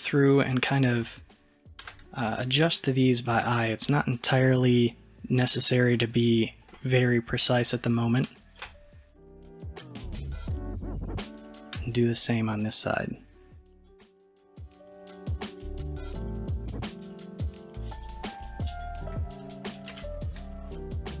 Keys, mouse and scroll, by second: 1.8 g, 9.5 click, 11.8 g, 18.4-19.0 middle drag, 19.0 click, 20.0 alt+z, 20.4 click, 20.8-21.2 middle drag.